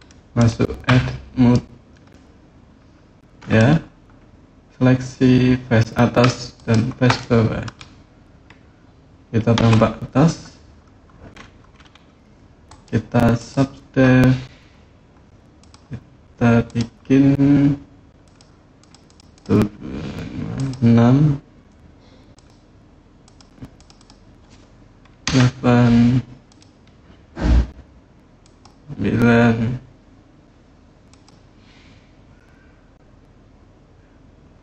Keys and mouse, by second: 0.6 Tab, 1.9-3.3 middle drag, 6.4 shift+click, 7.0 middle click, 9.3 KP_7, 12.5 click, 15.4 click, 16.5 click, 18.0 click, 18.6 click, 18.8 click, 19.1 click, 20.3-26.4 drag, 28.2 click, 30.9 click.